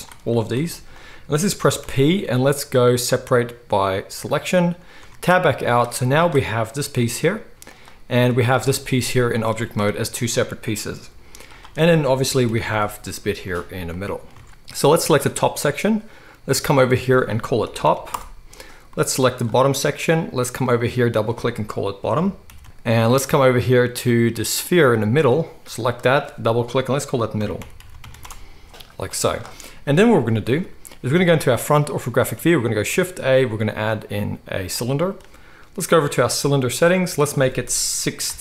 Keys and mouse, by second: 0.5 g, 1.8 p, 5.0 Tab, 5.4 z, 6.2-8.3 middle drag, 6.9 g, 8.3-11.5 drag, 8.6 g, 11.5-16.7 middle drag, 12.4 g, 14.3 alt+a, 16.7-19.5 drag, 19.5-20.7 middle drag, 20.7-25.0 drag, 22.6 o, 22.6 t, 25.0 middle click, 25.8-38.4 drag, 27.9 d, 29.8 KP_1, 30.4 alt+a, 32.8 shift+a.